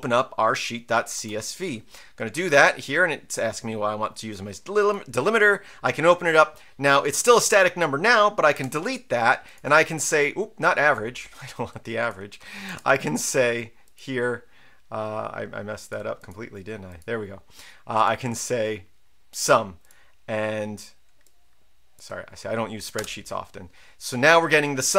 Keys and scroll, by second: 1.1 Return, 8.5 Delete, 12.6 BackSpace, 22.9 Return.